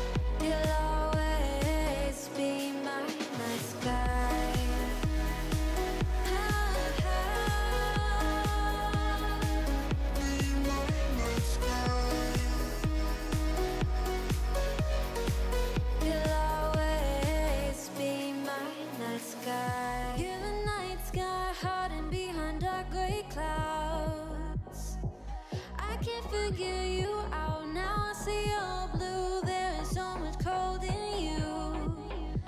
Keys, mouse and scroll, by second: 0.8-1.2 scroll down 4, 1.2-1.8 middle drag, 1.8 alt+z, 2.0 click, 2.2-3.2 middle drag, 3.2 3, 3.6 click, 4.0 KP_1, 4.3 g, 5.9 click, 6.1-7.4 middle drag, 8.8-9.8 shift+middle drag, 9.8 ctrl+r, 11.8 middle click, 12.3-13.1 scroll up 1, 13.1 g, 14.4 middle click, 14.8 scroll down 2, 14.9-15.4 shift+middle drag, 15.4 scroll up 1, 15.6 3, 15.9 click, 16.3 click, 16.6 click, 17.1 e, 19.3 click, 19.5 middle click, 19.8 scroll down 2, 20.0-21.4 middle drag, 22.0 Tab, 22.0 click, 22.3-23.0 shift+middle drag, 23.0 KP_1, 25.0-25.4 middle drag, 25.4 click, 25.6 Tab, 25.8 shift+click, 26.0 shift+middle click, 26.4 KP_1, 26.6 shift+a, 28.3 click, 28.8 g, 29.8 middle click, 30.0-30.3 scroll up 4, 30.3 KP_1, 30.7 shift+middle click, 31.1 s.